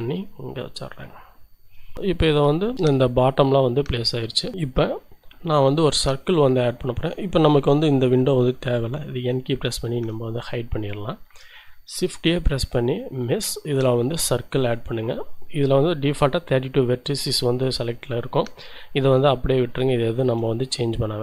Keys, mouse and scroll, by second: 1.8 shift+scroll up 1, 2.0 shift+click, 6.5-7.1 scroll down 1, 9.6 n, 10.7 scroll up 1, 11.0 shift+click, 12.1 shift+a, 14.5 click, 19.7 shift+click, 20.6-21.1 shift+scroll up 2, 20.8 shift+middle click.